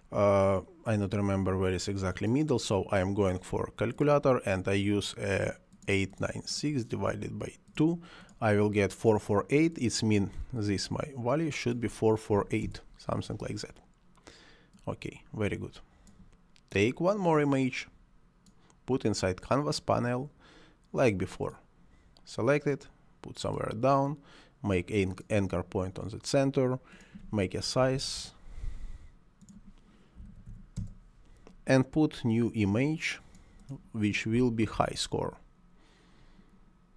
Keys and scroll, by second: 12.3 8, 12.6 Return, 27.9 8, 28.0 9, 28.2 6, 30.2 1, 30.3 2, 30.5 8, 30.8 Return, 34.5 c, 34.8 o.